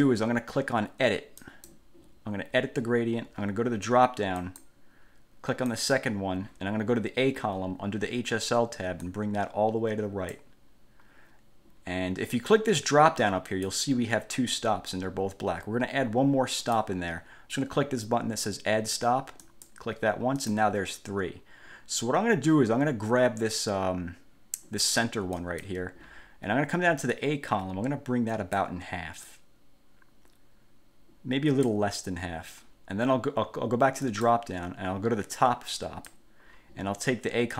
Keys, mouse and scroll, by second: 1.6 click, 4.6 click, 5.9 click, 9.2-10.7 drag, 13.7 click, 16.8 click, 19.6 click, 20.6 click, 25.6 click, 27.3-29.0 drag, 29.4-32.0 drag, 34.2 click, 36.0 click.